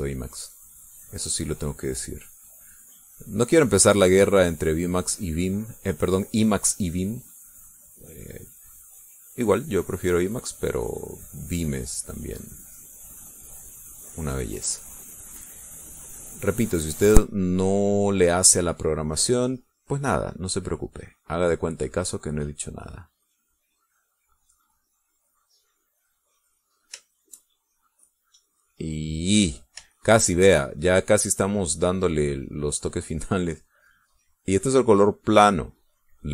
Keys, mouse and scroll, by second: 1.8 click, 2.8 click, 4.2-6.4 drag, 7.3 middle click, 8.2-9.4 drag, 9.7 click, 11.1 click, 11.9 click, 12.8 click, 13.7 click, 14.6-15.9 drag, 17.0 click, 20.9 middle click, 22.0-23.9 drag, 24.4 click, 25.8 click, 26.6 click, 28.4-30.2 shift+drag, 30.3 middle click, 31.2 shift+click, 31.7-34.3 shift+drag, 34.5-36.3 drag.